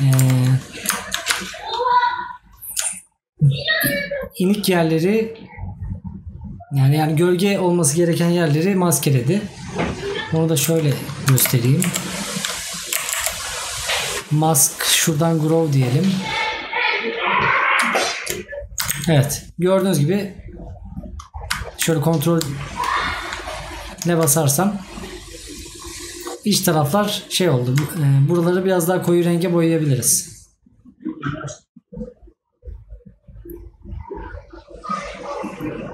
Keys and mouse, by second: 25.2 right click, 28.7 right click.